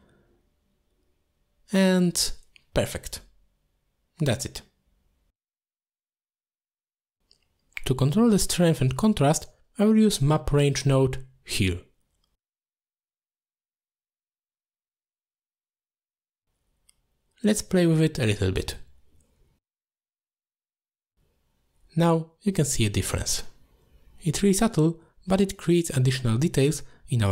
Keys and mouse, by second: 3.3 middle click, 4.5 x, 5.1-5.7 middle drag, 6.1 middle click, 11.7 middle click, 12.2 drag, 12.6 g, 13.4-15.1 drag, 15.1 middle click, 15.4 click, 16.1 middle click, 16.5 click, 16.7 click, 17.1 middle click, 17.6 middle click, 19.4 click, 19.5 click, 19.8 click, 20.1 click, 20.4 click, 20.8 click, 21.1 click, 22.9 click, 24.4 middle click, 24.8 middle click, 25.0 middle click, 25.4 click, 26.4-27.3 typing.